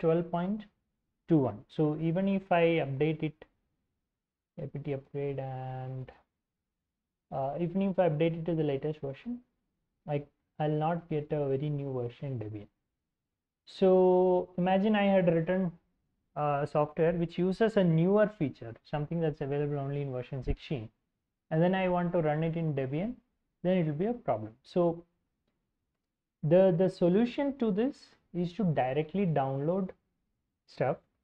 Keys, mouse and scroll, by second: 2.8-7.3 typing, 8.6 typing, 11.2-13.4 drag, 25.2-26.8 typing, 28.9 alt+Tab, 30.8-31.2 scroll down 2.